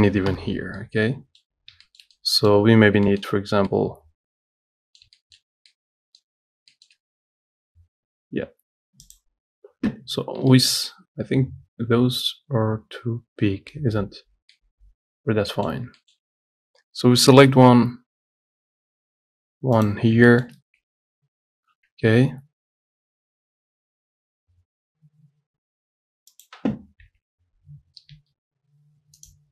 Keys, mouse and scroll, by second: 0.5 Delete, 0.8 scroll down 2, 1.0 middle click, 1.8 scroll up 1, 2.1 shift+middle click, 3.0 scroll up 1, 3.3 shift+middle click, 3.7 scroll up 1, 3.9-6.7 middle drag, 6.7 scroll up 1, 6.9-9.4 shift+middle drag, 9.4 click, 10.5-10.8 scroll down 2, 10.8-13.9 shift+middle drag, 14.0 scroll up 1, 14.5 scroll down 1, 14.8-17.6 middle drag, 17.6 shift+d, 20.3 scroll up 2, 20.6-22.0 shift+middle drag, 22.0 g, 27.3 g.